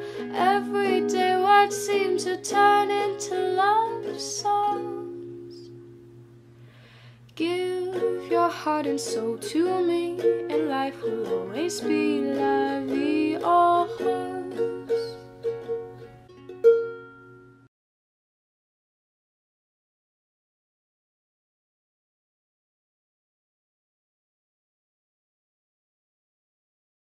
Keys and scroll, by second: 12.5-13.4 typing, 23.2 alt+[, 24.6 ctrl+alt+y, 24.9 alt+[, 25.1-26.4 typing.